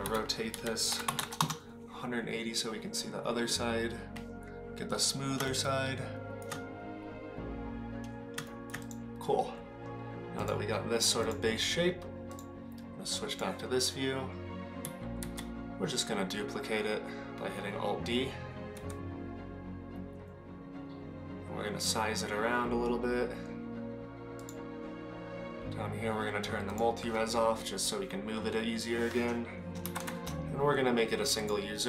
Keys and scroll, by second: 1.2 r, 29.9 shift+KP_Divide.